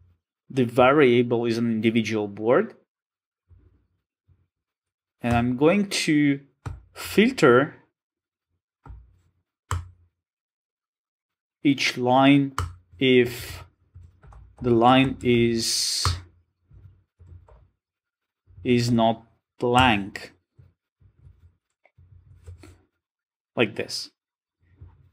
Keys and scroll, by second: 5.3 Return, 9.7 Return, 20.9 Return, 24.2 alt+super+l.